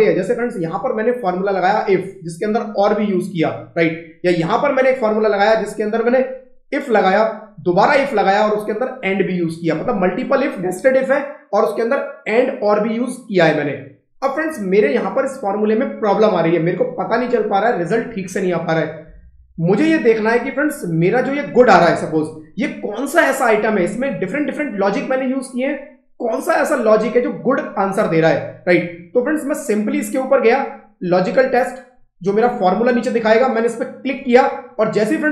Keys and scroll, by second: 4.1 Escape, 5.3 F2, 20.3 Escape, 23.7 F2.